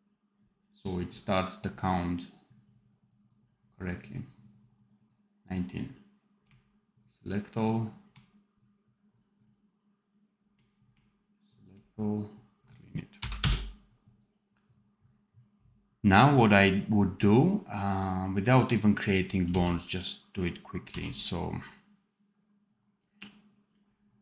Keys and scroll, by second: 19.4 x, 20.8 v.